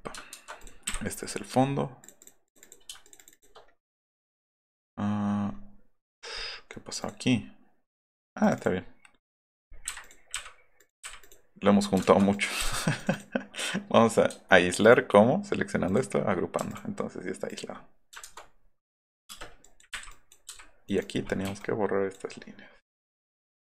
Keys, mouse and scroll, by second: 0.3 ctrl+z, 0.9 Delete, 2.0 click, 2.2 click, 2.5 click, 3.0 shift+click, 3.2 shift+click, 3.5-4.3 middle drag, 4.9-5.3 middle drag, 5.5 middle click, 6.0-6.6 middle drag, 6.7 middle drag, 7.0 click, 7.3 middle click, 8.4 click, 8.8-9.3 middle drag, 9.3 click, 10.0 click, 10.3 Delete, 10.8 click, 11.0 Delete, 11.2 click, 12.0 ctrl+z, 13.0 click, 13.1 click, 15.9 click, 16.2 scroll up 2, 16.5 m, 16.7 click, 17.5 click, 18.2 ctrl+z, 18.8 click, 19.1 click, 19.3 space, 19.3 click, 20.0 Delete, 20.1 drag, 22.4 middle click, 22.7 scroll down 1, 23.1 click.